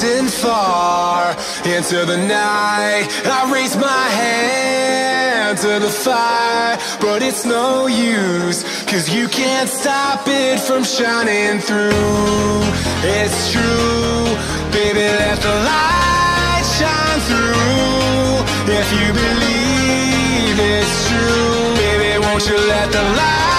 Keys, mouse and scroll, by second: 0.0 click, 1.0 KP_7, 1.8-3.1 scroll down 1, 3.1 scroll down 2, 3.1-6.5 drag, 6.5 shift+d, 9.2 click, 10.2 KP_1, 10.8-11.2 scroll up 2, 11.2-17.1 shift+middle drag, 17.1-18.6 drag, 18.6-18.9 scroll up 4, 18.9 shift+scroll down 1, 19.0 shift+middle click, 19.9-20.5 scroll up 4, 20.5-21.3 shift+middle drag, 21.3 scroll up 2, 22.2 s.